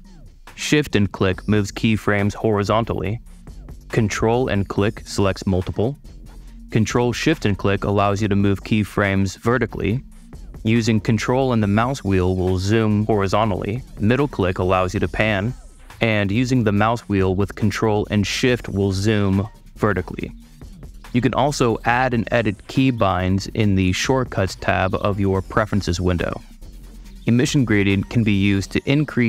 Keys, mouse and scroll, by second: 0.9-3.0 shift+drag, 4.0 ctrl+super+click, 4.9 ctrl+super+click, 5.8 ctrl+super+click, 7.5-10.5 ctrl+shift+super+drag, 10.5 ctrl+super+middle click, 11.7 ctrl+super+middle click, 11.9 ctrl+super+middle click, 12.4-13.1 ctrl+super+middle drag, 14.0-15.4 super+middle drag, 18.1 ctrl+shift+super+middle click, 18.5 ctrl+shift+middle click, 18.9 ctrl+shift+super+middle click, 19.4 ctrl+shift+super+middle click, 19.6 shift+middle click, 20.0 shift+middle click, 20.5 ctrl+shift+middle click, 20.6 super+click, 21.9 middle click, 22.4 middle click, 22.8 middle click, 27.0-29.2 super+drag.